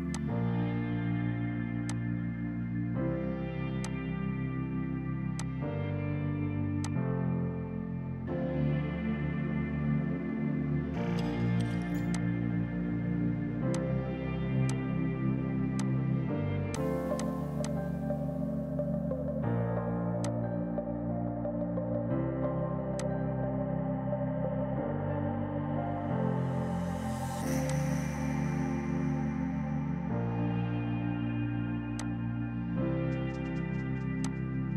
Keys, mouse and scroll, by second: 0.2 click, 12.2 click, 13.6 space, 13.8 click, 14.2 space, 14.8 click, 20.3 click, 26.0 KP_Decimal, 27.8 click, 28.7 KP_Decimal, 28.9 KP_Enter, 30.2 space, 31.3 p, 32.0 F2, 32.1 click, 33.6 space, 34.3 click.